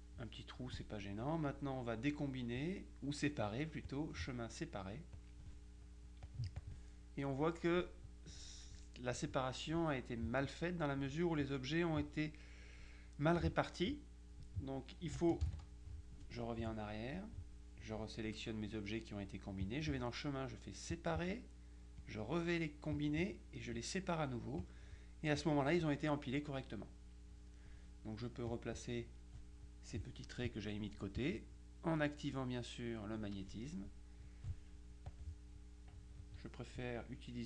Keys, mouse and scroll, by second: 4.0 click, 5.2 click, 6.3-7.2 drag, 15.5 ctrl+z, 17.2 click, 19.7 click, 21.0 click, 22.1 click, 23.0 click, 23.9 click, 24.7 click, 25.5 click, 27.2 middle click, 28.6 click, 31.2 click, 35.2 click.